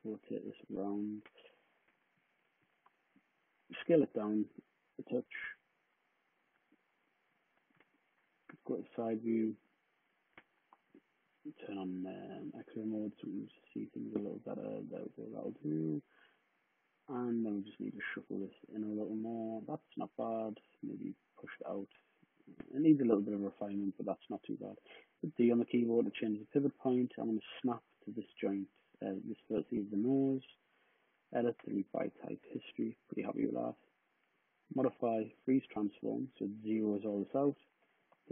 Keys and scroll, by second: 2.1-3.3 typing, 7.0-8.3 typing, 9.9 w, 15.3 typing, 24.8 d, 26.5-27.2 typing, 29.4-30.2 typing, 38.1 super+d.